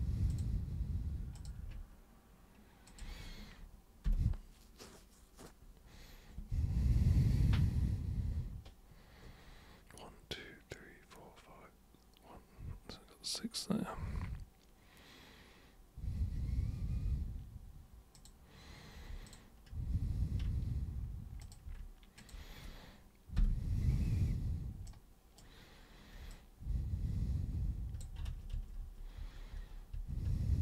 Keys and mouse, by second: 0.3 super+click, 1.4 super+click, 2.9 ctrl+shift+super+click, 18.2 super+click, 19.3 ctrl+shift+super+click, 21.4 super+click, 22.2 ctrl+shift+super+click, 24.9 super+right click, 26.3-28.0 alt+super+drag, 28.3 ctrl+super+z, 28.5 ctrl+super+z, 28.8 ctrl+super+z, 29.2 ctrl+super+z, 29.5 ctrl+super+z, 30.0 ctrl+super+z, 30.2 ctrl+super+z.